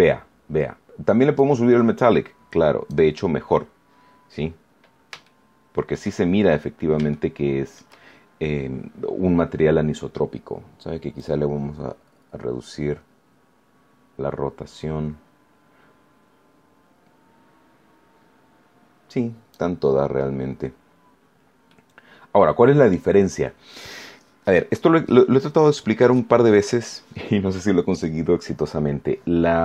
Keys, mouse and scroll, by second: 1.3-3.0 drag, 4.7 scroll down 1, 5.2 shift+middle click, 6.4 shift+scroll up 1, 7.0 shift+middle click, 8.4 scroll up 1, 9.1 scroll up 1, 11.1-19.6 drag, 20.9-21.4 scroll down 1, 21.6-23.0 middle drag, 23.8-24.2 scroll up 1, 24.3 scroll down 1, 25.2 scroll down 2.